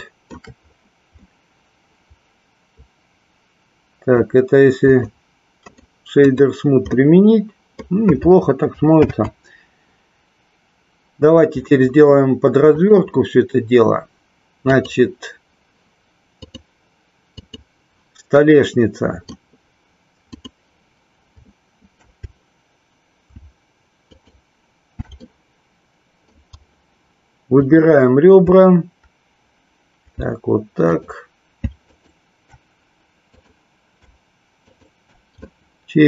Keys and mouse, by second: 0.0 shift+middle click, 1.2-4.4 middle drag, 5.0 click, 5.7 right click, 7.0-8.0 middle drag, 12.6-14.9 drag, 16.4-17.7 drag, 18.5 middle click, 20.2 click, 24.0 alt+shift+click, 25.2-26.5 middle drag, 27.7 click, 30.7 alt+shift+click, 32.0 shift+click, 35.6 middle click.